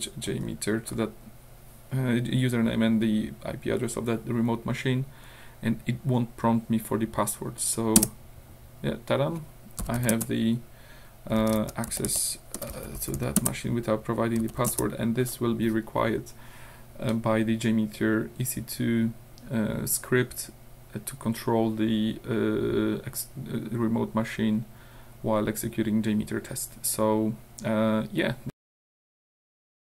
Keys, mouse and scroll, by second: 8.0 Return, 9.8 l, 10.1 Return, 11.1-13.2 typing, 13.4 Return, 14.4 l, 14.7 Return.